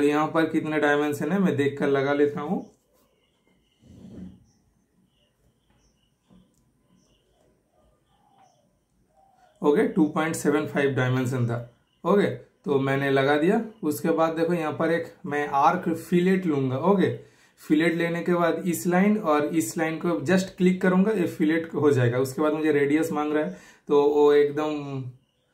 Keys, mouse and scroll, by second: 9.4 super+Return, 17.8 super+Return.